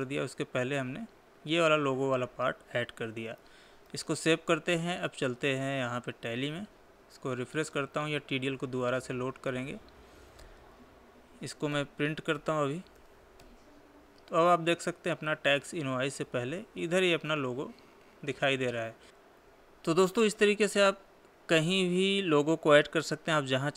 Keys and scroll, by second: 4.4 ctrl+s, 9.4 Escape, 12.2 ctrl+p, 13.5 Left, 20.1 Tab, 21.4 Tab.